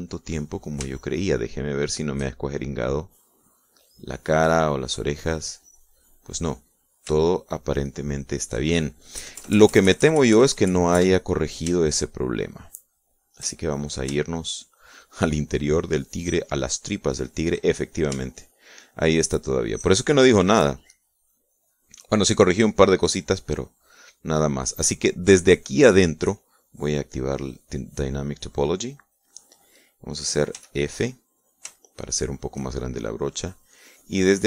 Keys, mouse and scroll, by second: 0.9-1.9 drag, 2.2 shift+middle click, 2.7-8.2 shift+middle drag, 8.4-9.7 shift+middle drag, 10.4 KP_Add, 13.0 shift+click, 13.8 shift+click, 14.7-16.4 shift+drag, 17.0 shift+click, 18.3 shift+click, 18.9 shift+click, 19.3 shift+middle click, 20.7 shift+middle click, 22.7 click, 24.2 middle click, 25.7 middle click, 26.7 shift+middle click, 28.5 click, 31.8 f, 32.5 click, 33.1 shift+click, 34.3-34.4 drag.